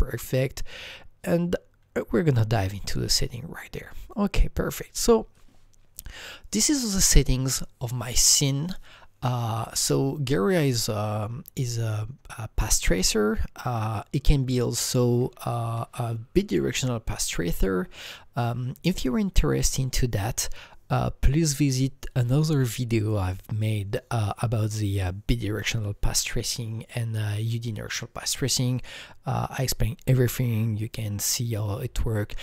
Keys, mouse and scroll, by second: 4.0 click, 14.5 click, 14.6 click, 15.6 Right.